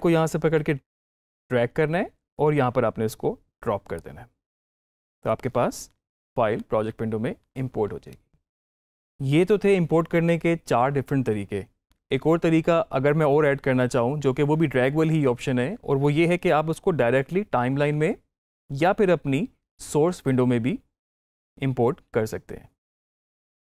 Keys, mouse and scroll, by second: 0.2-8.8 drag, 23.4 alt+Tab.